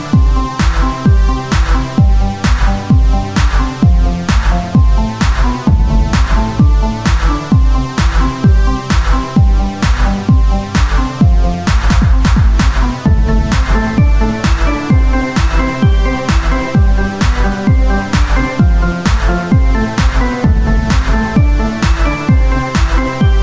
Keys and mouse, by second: 0.6 c, 1.0 KP_1, 1.3-2.9 drag, 3.6 z, 5.3 e, 6.7 ctrl+z, 7.4 e, 9.2 Tab, 11.6 Tab, 14.0 z, 15.1 KP_3, 16.4 z, 16.9 z, 17.1 c, 19.2 click, 19.8 shift+d, 20.9 z, 22.3-23.4 drag, 22.8 o.